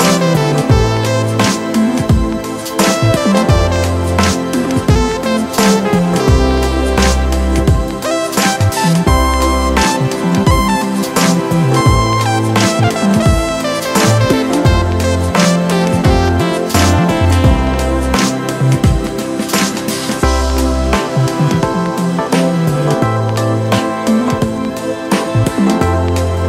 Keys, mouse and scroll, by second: 25.8-26.2 scroll up 1.